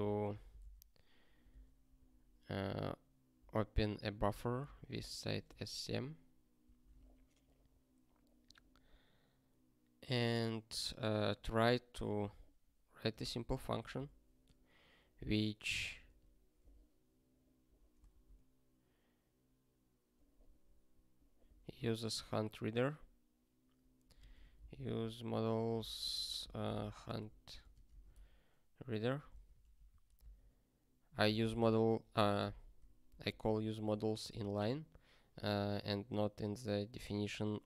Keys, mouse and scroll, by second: 0.0 alt+x, 4.9 super+b, 6.6 super+b, 8.9-9.6 scroll down 1, 9.6-10.5 scroll down 1, 10.5 scroll down 1, 11.1 scroll down 1, 11.6-13.1 scroll up 1, 13.1 click, 13.5 Return, 13.7 ctrl+p, 13.9 Return, 16.0 (, 21.5 super+o, 23.9-29.2 typing, 29.8 ctrl+g, 29.9 ctrl+e, 30.1 Return, 33.0 ctrl+p, 33.3 ctrl+space, 33.4 ctrl+n, 34.2 ctrl+g.